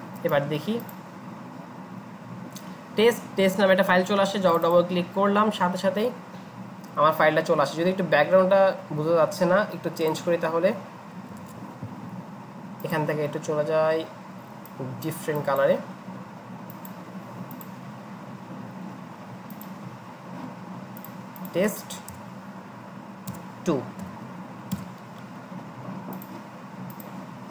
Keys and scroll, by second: 11.4 ctrl+alt+shift+s, 23.3 BackSpace, 24.0 BackSpace, 24.7 Return.